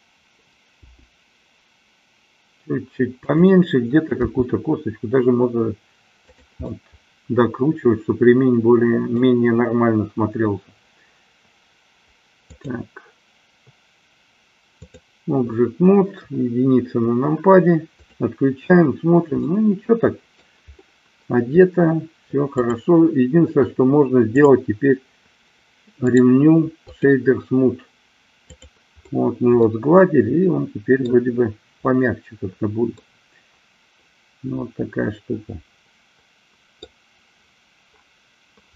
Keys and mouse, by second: 1.0 g, 3.5 click, 4.4 r, 6.5 click, 6.7-9.4 middle drag, 12.5-15.1 drag, 16.1 KP_1, 19.5-20.5 middle drag, 24.4 click, 26.1-27.1 right drag, 28.5 click, 29.6-31.1 middle drag, 33.0-37.0 middle drag.